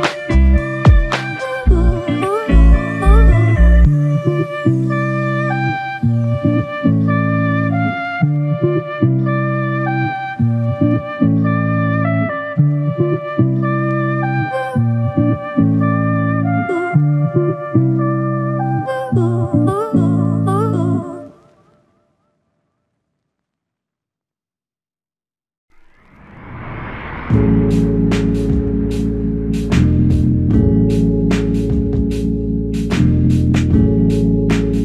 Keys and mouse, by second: 2.6 shift+click, 2.8 shift+click, 8.0 alt+click, 11.5 double click, 22.6 shift+click, 24.3 alt+click, 24.9 ctrl+click, 29.0 shift+click, 29.3 shift+double click, 30.7 alt+click, 32.4 g, 33.1 alt+click.